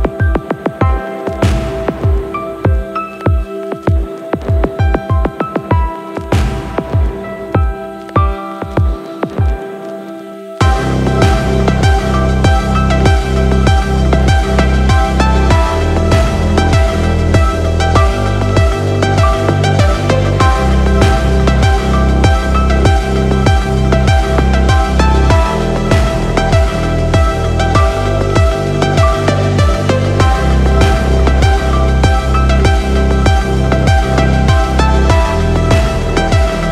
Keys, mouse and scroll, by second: 0.0 shift+middle click, 1.9 click, 3.9 click, 4.7 click, 5.1-6.8 scroll down 4, 6.8 click, 9.7 click, 11.1 middle click, 12.1-12.5 shift+middle drag, 13.2-14.5 drag, 15.9-16.3 scroll down 2, 16.6 shift+middle click, 17.5-17.9 scroll down 1, 17.9 shift+middle click, 25.6 click, 26.6 n, 27.4-28.6 scroll up 3, 30.9 click, 32.5-36.7 drag.